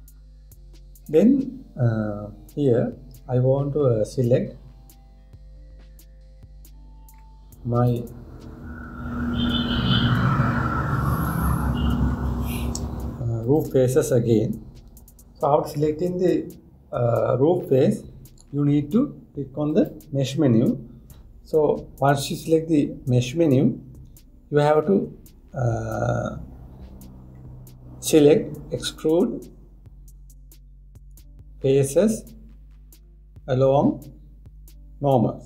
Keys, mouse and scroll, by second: 1.9-4.9 middle drag, 8.4 click, 14.0 shift+click, 16.4-19.5 middle drag, 20.4-23.5 drag.